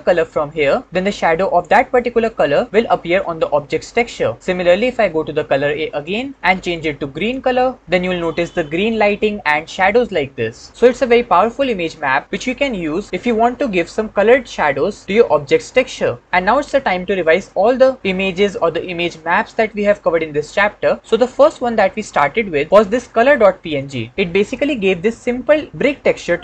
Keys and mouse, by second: 5.8 click, 21.2-22.5 shift+drag.